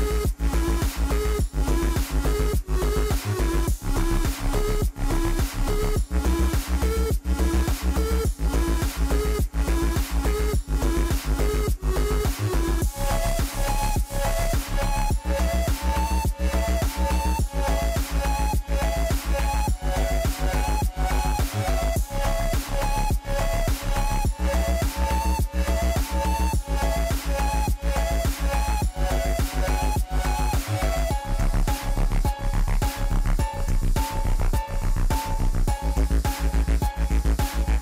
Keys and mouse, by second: 0.9 click, 1.5 click, 2.4-3.4 drag, 4.4 click, 6.9 click, 7.6 click, 8.4-11.9 drag, 9.6 s, 12.3 click, 13.6 click, 14.2 click, 15.1 click, 15.5 KP_0, 16.2 middle click, 17.1 Tab, 17.6 Tab, 17.7 click, 18.0 Tab, 18.4 shift+middle click, 19.6 click, 20.3 click, 21.3 middle click, 21.7 Tab, 21.9 Tab, 22.4 middle click, 24.4 click, 26.2 click, 26.9 click, 27.9 click, 29.5 ctrl+z, 31.8 Tab, 32.0 Tab, 32.5 middle click, 33.9 ctrl+r, 36.4 ctrl+r.